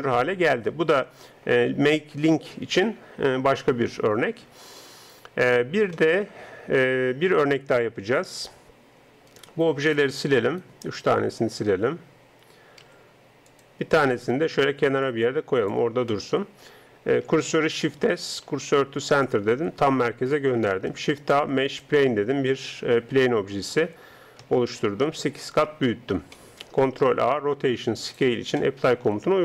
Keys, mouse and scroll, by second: 9.3-12.9 right drag, 12.9 x, 14.1 right click, 15.1-16.9 drag, 16.9 middle click, 17.7 shift+s, 20.9 shift+a, 23.3 s, 26.4-29.0 middle drag, 27.1 ctrl+a, 29.1 middle click.